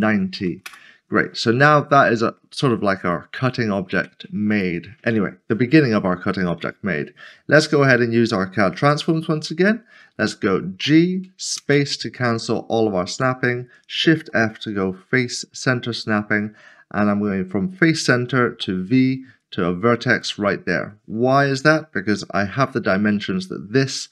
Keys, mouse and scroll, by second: 0.0 typing, 0.6 Return, 1.7 middle click, 3.1 shift+middle click, 7.3 click, 8.8 alt+c, 11.6 typing, 14.1 typing, 17.3 click, 18.6 typing, 20.1 click, 22.3 typing.